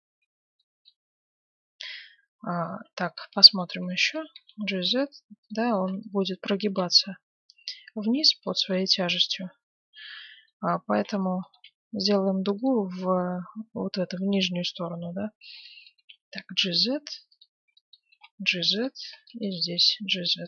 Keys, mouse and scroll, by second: 1.5 a, 2.0 a, 2.8 Tab, 3.6 a, 3.9 b, 4.3 g, 5.7 a, 5.8 b, 6.7 g, 8.7-10.4 middle drag, 10.8 a, 11.1 b, 11.5 g, 12.7 z, 15.0 a, 15.5 b, 15.9 g, 17.5 a, 18.1 g, 18.9 a, 19.6 g.